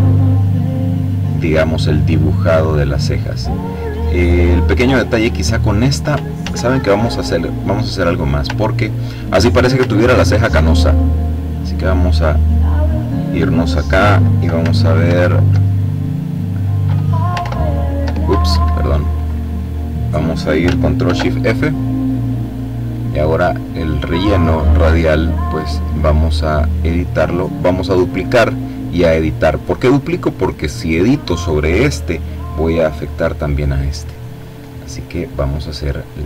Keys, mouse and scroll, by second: 6.0 ctrl+z, 7.3 click, 8.2-9.0 ctrl+scroll up 3, 9.6-10.0 ctrl+scroll down 3, 10.3 click, 12.5 click, 14.7 alt+r, 17.0 ctrl+i, 18.1 Escape, 20.6 ctrl+shift+f, 22.9 click, 27.6 click, 28.6 click, 33.8-36.2 drag.